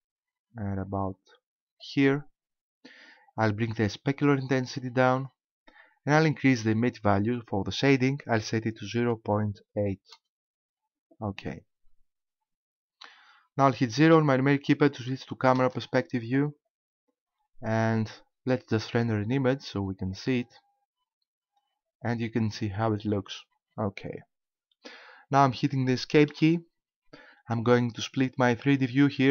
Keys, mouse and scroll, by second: 4.4 click, 7.8 click, 15.6 KP_0, 18.9 click, 20.0 click, 26.3 Escape.